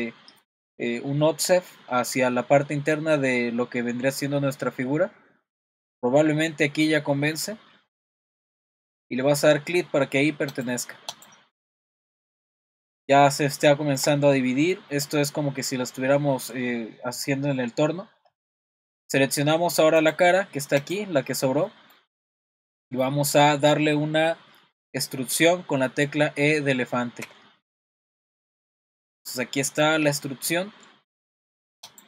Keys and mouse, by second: 11.1 click, 11.8-13.3 middle drag, 13.7 shift+middle click, 14.5 middle click, 20.0 click, 20.9 click, 21.7 middle click, 22.5 shift+middle click, 27.3 e.